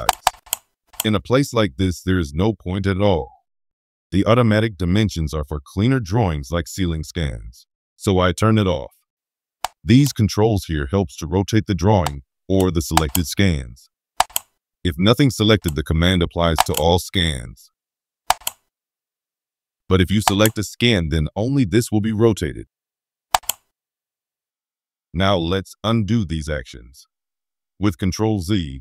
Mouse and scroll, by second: 0.0 click, 0.2 click, 0.4 click, 0.8 click, 12.2 middle click, 12.9 click, 14.1 click, 16.5 click, 18.2 click, 20.2 click, 23.3 click.